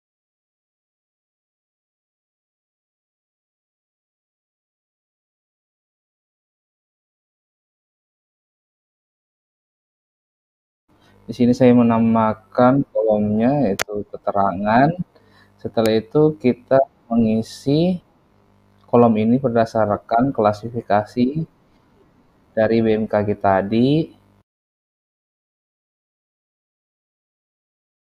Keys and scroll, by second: 9.2 typing, 10.6-11.9 typing, 13.2-15.8 typing.